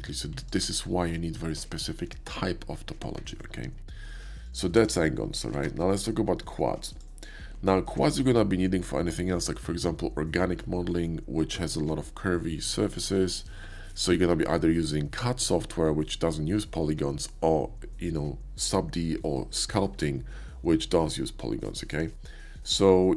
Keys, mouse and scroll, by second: 0.6 Tab, 3.4 middle click, 4.0 click, 4.4 shift+click, 4.8 x, 4.8 click, 5.6 shift+a, 6.9 click, 7.6-7.9 shift+middle drag.